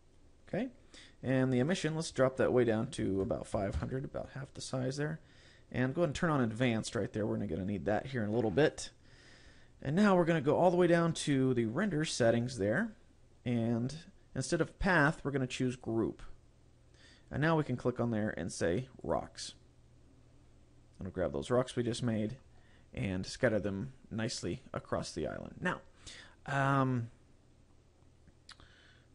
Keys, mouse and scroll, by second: 1.7 click, 6.9 click, 9.6-11.2 scroll down 9, 11.2-12.9 scroll down 4, 12.9-14.6 scroll down 2, 16.2 click, 17.8 click, 23.4 middle click, 24.1-24.6 scroll up 1, 24.7 scroll up 1.